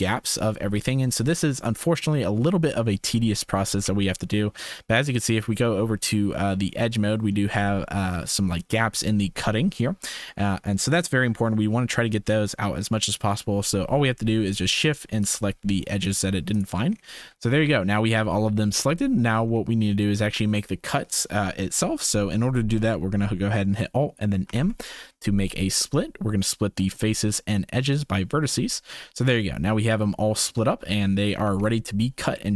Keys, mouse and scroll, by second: 3.8 2, 14.8 shift+click, 17.5 shift+click, 18.9 shift+click, 20.1 shift+click, 24.4 alt+m, 29.4 shift+middle click, 32.3 shift+middle click.